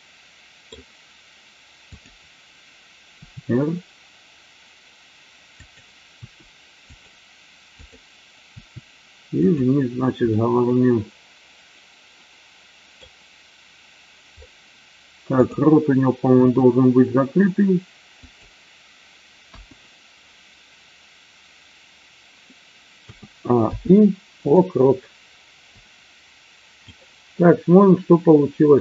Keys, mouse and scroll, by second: 1.9 click, 3.1 r, 5.6 click, 6.2 r, 6.9 click, 7.8 click, 9.4 click, 10.3-12.9 middle drag, 15.3 click, 16.3 r, 18.2 click, 23.2 a, 23.7 i, 25.8-26.9 drag.